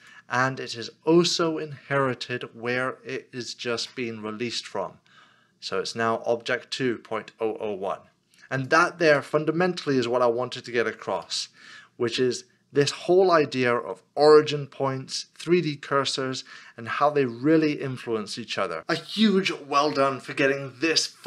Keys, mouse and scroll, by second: 9.2 middle click, 10.4 scroll down 1, 11.4 middle click.